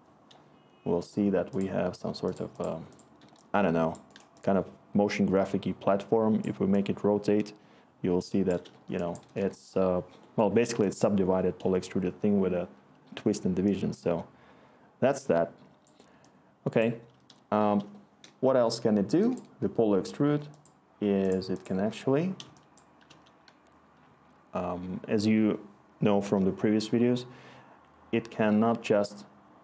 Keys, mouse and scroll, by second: 9.4 Return, 20.2 Delete, 22.4 click, 22.9 click, 25.3 click.